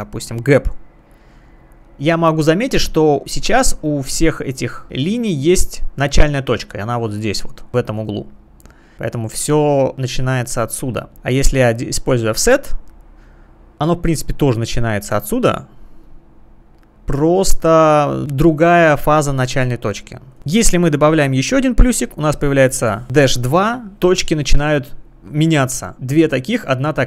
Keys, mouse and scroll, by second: 1.0 click, 6.4 click, 8.7 click, 11.1 click, 12.4 click, 14.4 click, 15.8 click, 20.3 click, 22.3 click.